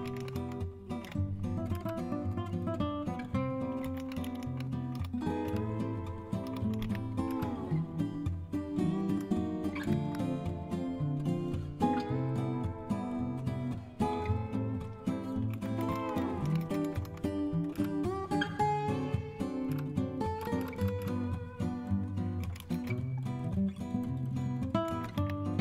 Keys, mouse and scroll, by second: 0.0-1.0 typing, 1.7 Return, 3.6-7.7 typing, 9.6-10.3 typing, 11.3 scroll up 1, 11.6 typing, 14.2-15.4 scroll down 1, 15.2-18.2 typing, 19.4-21.0 typing, 22.1-23.0 typing, 24.8-25.1 typing.